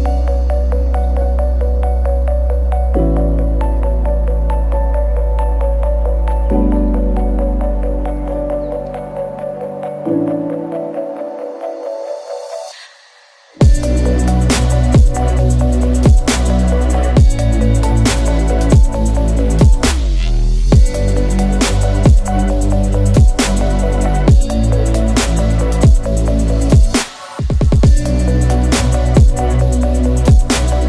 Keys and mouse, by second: 0.1 ctrl+s, 0.3 middle click, 1.4 click, 1.7 ctrl+click, 2.1 ctrl+e, 2.7 a, 3.0-4.9 middle drag, 5.1 ctrl+right click, 5.3 ctrl+e, 6.0 a, 6.6 middle click, 7.2 right click, 8.4 ctrl+e, 9.1 a, 9.5-10.5 middle drag, 11.4 right click, 11.7 ctrl+e, 12.1 a, 12.3 middle click, 13.1 a, 13.7 u, 14.1 a, 14.7 shift+middle click, 15.7 click, 16.3 middle click, 16.5 a, 17.8 middle click, 18.3-22.0 middle drag, 22.7 click, 23.0 shift+click, 23.5 click, 23.7 shift+click, 24.0 ctrl+e, 25.2 a, 25.6 shift+middle click, 25.8 a, 26.4 u, 26.7 a, 27.8 3, 28.4 click, 29.0 ctrl+l, 29.7 h.